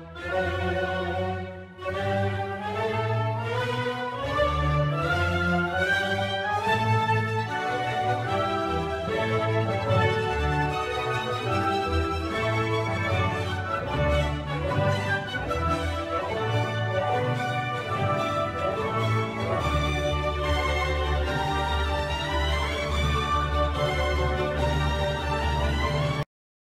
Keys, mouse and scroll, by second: 0.9 r, 7.4 r, 8.9 g, 10.9 Tab, 11.8 BackSpace, 11.9 BackSpace, 14.5-15.5 typing, 17.7 Return, 18.4 click, 19.9 Tab, 20.5 click, 23.2 click.